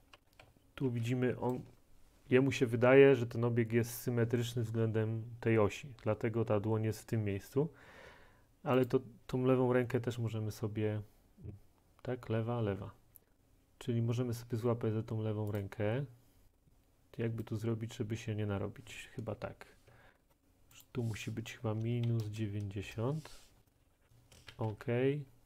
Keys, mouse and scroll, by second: 0.0-0.9 typing, 1.6 click, 8.9-12.4 drag, 12.7 click, 15.6 click, 19.9 click, 20.3 ctrl+click, 21.8-22.3 typing, 22.9 Return, 23.7-25.4 typing, 24.1 right click.